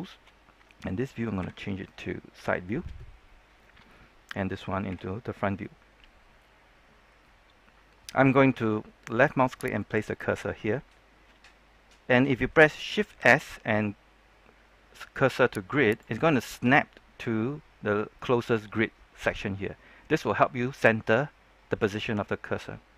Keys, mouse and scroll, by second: 1.3 KP_3, 2.2-4.8 scroll up 1, 4.8 KP_1, 9.7 click, 15.8 click, 15.8 shift+s, 17.6-19.7 scroll up 1.